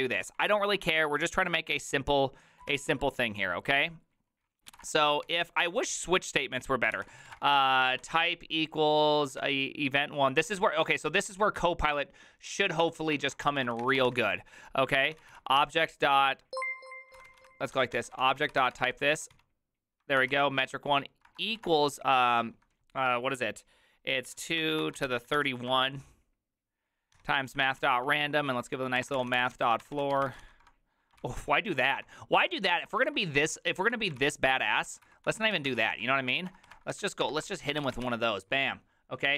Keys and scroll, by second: 0.0-0.3 typing, 0.5 ctrl+d, 1.5-2.8 typing, 3.0 Return, 4.5-5.3 typing, 6.8-8.4 typing, 9.5 typing, 10.5 Tab, 10.9-19.9 typing, 20.2 ctrl+n, 20.4 ctrl+y, 21.0-21.8 typing, 24.1-25.9 typing, 27.2-38.6 typing.